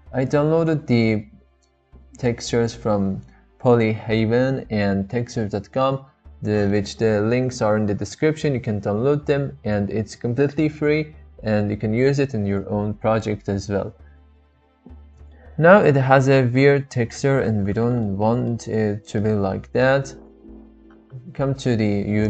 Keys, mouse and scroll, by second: 15.3-16.3 middle drag, 16.6-16.9 shift+middle drag, 17.0-18.0 middle drag, 18.3 shift+middle click, 18.6 middle click.